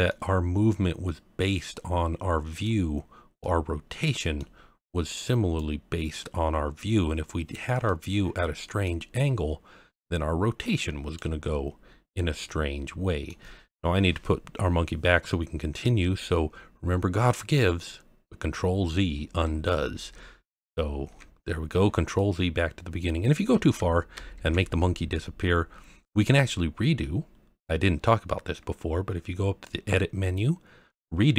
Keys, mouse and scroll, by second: 0.1-2.6 middle drag, 3.4-4.4 middle drag, 5.5 click, 7.8-8.8 middle drag, 9.9 click, 11.7-12.0 scroll down 1, 12.0-13.3 middle drag, 17.8-18.5 scroll up 1, 18.5-19.4 scroll up 1, 19.4 ctrl+z, 19.9 ctrl+z, 20.4 ctrl+z, 21.7-22.6 scroll down 2, 22.2-23.1 middle drag, 24.1 ctrl+z, 29.6-31.2 drag.